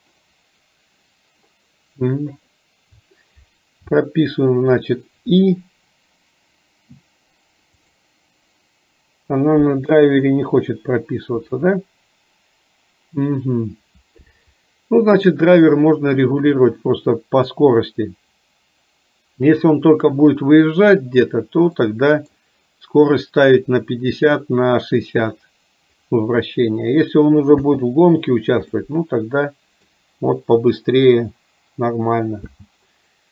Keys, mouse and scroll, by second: 7.9 click, 21.9 middle click, 28.9-30.0 middle drag.